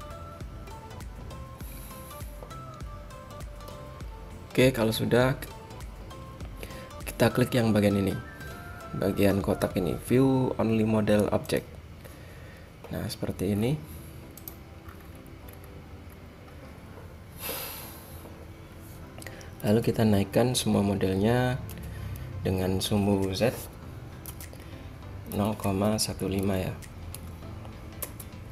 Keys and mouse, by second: 11.9-13.7 drag, 13.7-15.2 middle drag, 15.2 click, 15.6 middle click, 16.2-19.8 middle drag, 19.8 a, 21.6 g.